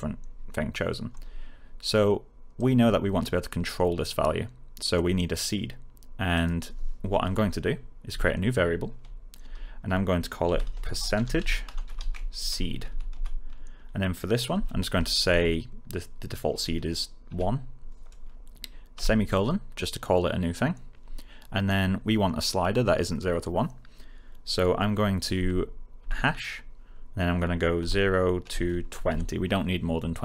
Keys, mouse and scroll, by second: 2.5-3.4 click, 6.3 click, 8.0 Return, 9.4-15.2 typing, 17.2 1, 25.3 space, 27.7-29.5 typing.